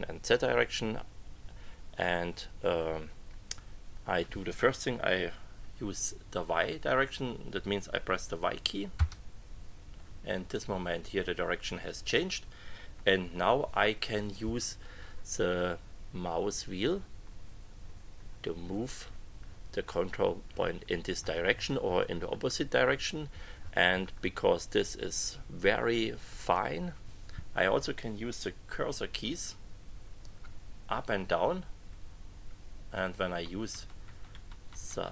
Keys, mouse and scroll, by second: 8.9 y, 16.5-21.1 scroll down 4, 21.1-23.1 scroll up 12, 23.3-24.1 scroll down 2, 24.1 scroll up 2, 24.3-24.7 scroll down 2, 31.8 Up, 32.9 Up, 33.7 Down.